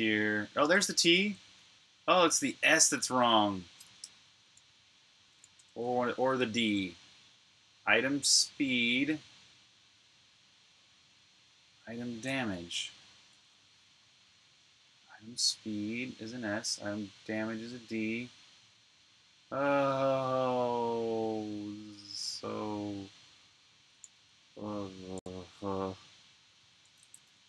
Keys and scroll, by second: 1.4-3.4 typing, 3.9 super+q, 5.4 v, 5.6 Return, 10.6 super+k, 12.5 super+Tab, 24.1 super+Tab, 25.5 super+Tab.